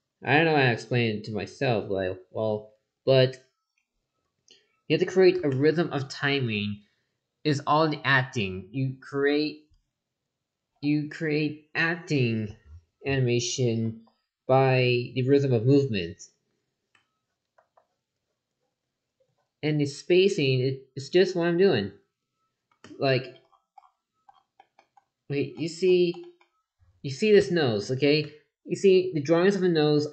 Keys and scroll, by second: 13.8 ctrl+z, 17.6 ctrl+z.